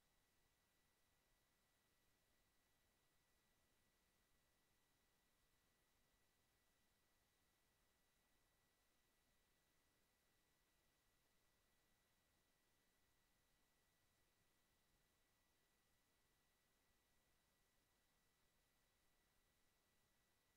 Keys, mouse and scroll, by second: 1.2-1.9 drag, 2.4-3.5 drag, 3.9-7.8 drag, 8.4-10.8 drag, 11.6-13.2 drag, 15.7 click.